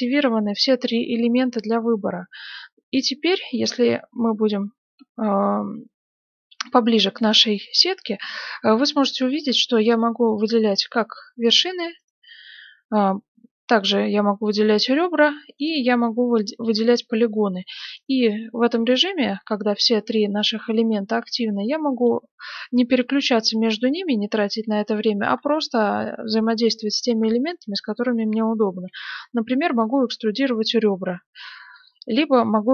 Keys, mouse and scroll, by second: 2.1-3.8 middle drag, 3.5 right click, 5.2-6.7 middle drag, 9.8 right click, 11.9 right click, 13.7 right click, 15.5 right click, 17.9 right click, 21.7-23.4 middle drag, 24.7 right click, 28.8 e, 32.2 right click.